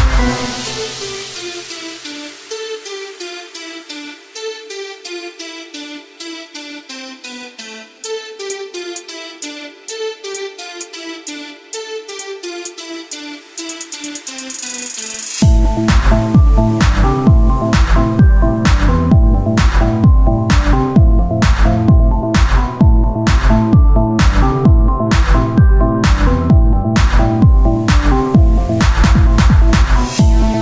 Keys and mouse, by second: 1.5 ctrl+Tab, 2.2 z, 4.7 z, 5.4 i, 6.6 ctrl+z, 6.9 Tab, 7.2 ctrl+a, 7.6 Tab, 8.3 i, 11.4 w, 12.5 ctrl+z, 13.0 z, 15.2 click, 15.3 right click, 15.9 w, 16.5 z, 19.3 z, 20.4 i, 22.2 click, 24.3 s, 26.5-27.8 drag, 27.3 w, 27.8 Tab, 28.9 s.